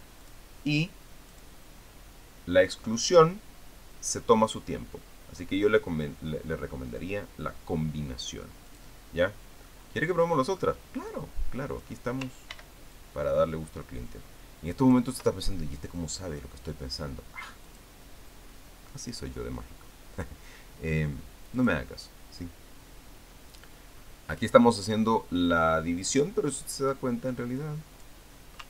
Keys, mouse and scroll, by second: 1.0 click, 2.1 click, 9.5 click, 10.5-11.7 middle drag, 11.9 click, 13.3 ctrl+d, 13.7-15.9 ctrl+drag, 18.4 click, 22.3 click, 25.7-28.6 drag.